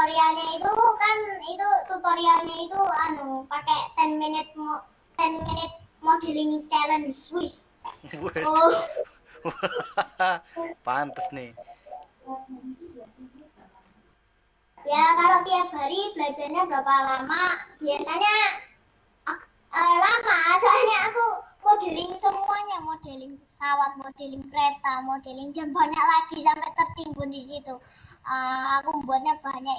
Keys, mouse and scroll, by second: 0.6-1.3 scroll down 1, 1.3-20.5 middle drag, 20.5-21.2 scroll up 1, 21.2-26.7 middle drag.